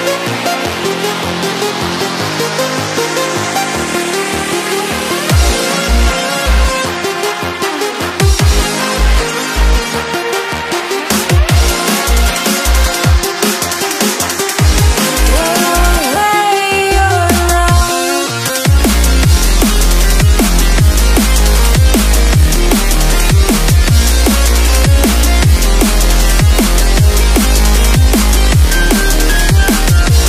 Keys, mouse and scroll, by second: 0.3 z, 0.5 right click, 1.1 click, 3.1 click, 4.9 click, 6.1 s, 7.4 click, 11.3 click, 14.3 s, 15.7 click, 20.5 click, 24.5 f, 25.8 click, 29.5 ctrl+z.